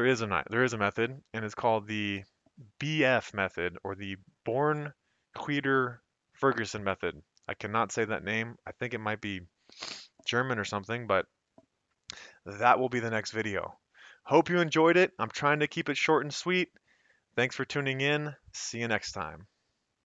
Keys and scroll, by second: 1.8 Escape.